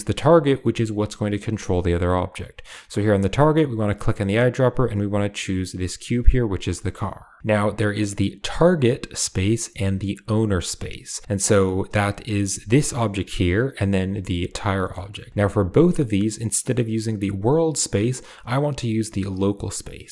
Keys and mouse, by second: 5.5 typing, 6.6 shift+middle click, 11.8 right click, 12.4 g, 13.6 right click, 13.9 g, 14.8 shift+click, 15.2 shift+click.